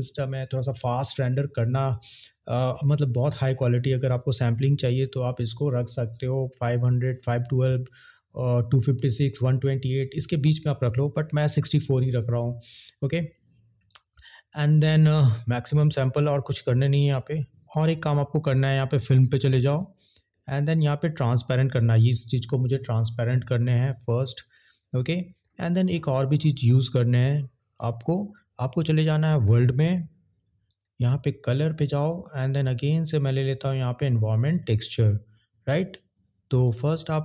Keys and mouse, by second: 21.3 click, 30.7-34.8 drag, 36.6 click.